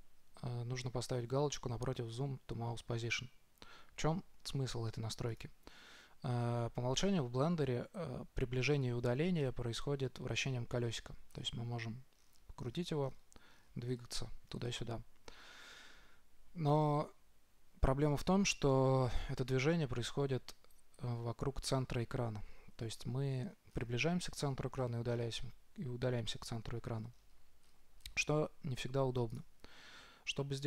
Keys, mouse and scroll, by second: 11.1-16.7 middle drag, 23.6-27.3 middle drag, 27.5-30.1 middle drag.